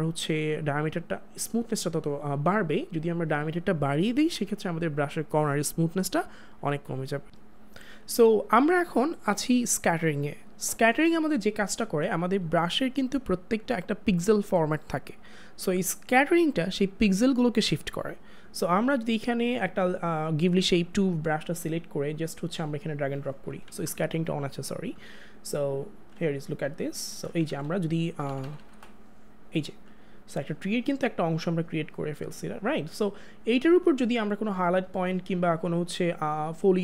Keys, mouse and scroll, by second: 23.5 click, 23.7 ctrl+z, 24.7 click, 27.4 click, 27.5 ctrl+z.